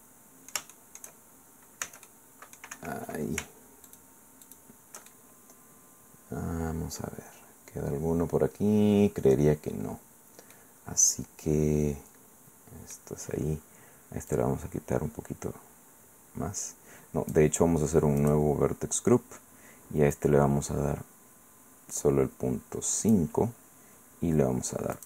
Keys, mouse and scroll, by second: 1.1 shift+middle click, 1.8 c, 2.1 middle click, 2.7 Escape, 3.9 shift+middle click, 4.4 shift+right click, 5.1-9.8 shift+middle drag, 9.8-10.5 scroll down 1, 10.5-13.1 middle drag, 14.3-17.5 drag, 18.2 click, 20.1-23.3 drag, 24.9 click.